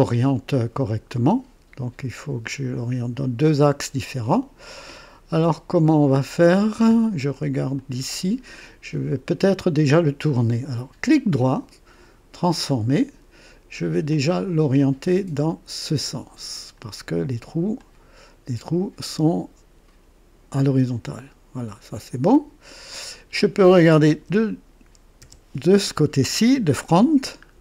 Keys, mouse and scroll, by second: 0.5-7.0 drag, 7.8 click, 11.0 right click, 12.4 click, 14.1-16.8 drag, 17.7-20.5 drag, 20.7-22.4 drag, 24.1 KP_2, 25.2 KP_1, 27.5 scroll up 1.